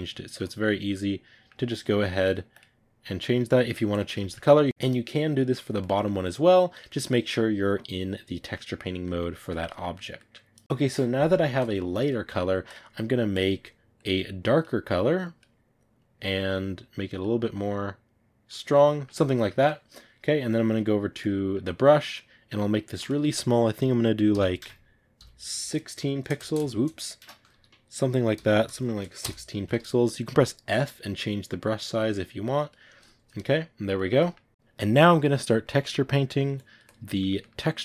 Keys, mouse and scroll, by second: 0.6 click, 0.8-3.1 middle drag, 3.1 click, 4.1 click, 4.1-12.6 ctrl+middle drag, 12.6 click, 13.9 click, 18.8-20.6 ctrl+middle drag, 20.6 click, 21.2-29.1 shift+middle drag, 29.1 BackSpace, 30.1 middle click, 30.6 f, 33.2-34.5 ctrl+middle drag, 34.5-36.9 drag, 36.9-37.8 ctrl+middle drag.